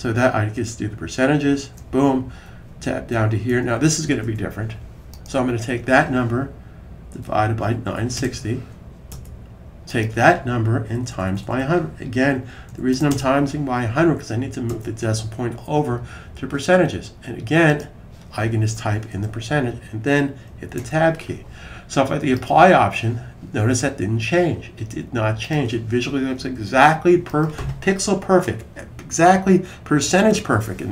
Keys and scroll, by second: 1.3 typing, 6.8-8.4 typing, 10.7 Right, 10.9 Right, 11.0 Right, 11.2 Right, 11.3 Right, 11.8-13.2 typing, 14.7 typing, 19.0 typing, 26.6 super+s.